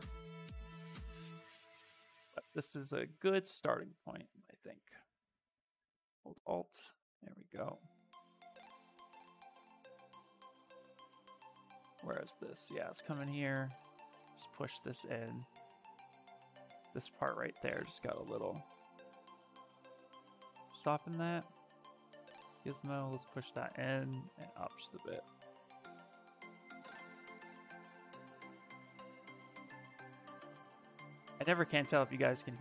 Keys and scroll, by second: 7.1 s, 9.9 s, 14.7 s, 18.6 w, 21.0 w, 24.2 q, 25.2 s, 28.6 s, 29.4 s, 31.4 ctrl+z, 31.8 ctrl+z.